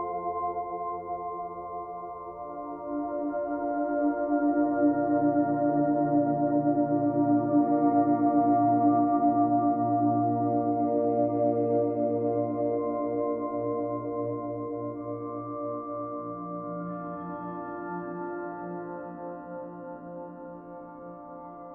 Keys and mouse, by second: 0.3 Escape, 1.5 g, 2.7 click, 3.8 alt+click, 4.2 shift+click, 4.8 shift+click, 5.4 alt+click, 6.6 shift+click, 6.9 shift+click, 7.6 shift+click, 8.4 g, 8.9 x, 9.7 click, 10.6 Tab, 11.1 alt+drag, 11.6 alt+drag, 12.1-12.6 ctrl+alt+drag, 12.9-13.2 ctrl+alt+drag, 13.5-14.1 drag, 14.3-14.7 drag, 15.5 click, 16.0 alt+a, 16.6-16.9 ctrl+alt+drag, 17.2-18.6 alt+drag, 19.0-20.7 alt+drag.